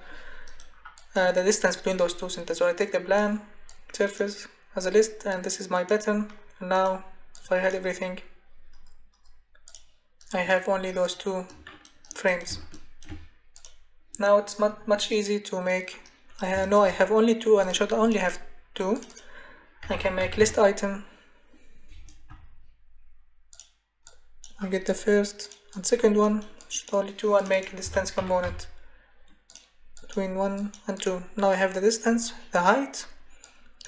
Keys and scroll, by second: 19.5-20.9 typing, 22.3 BackSpace, 27.6-28.9 typing.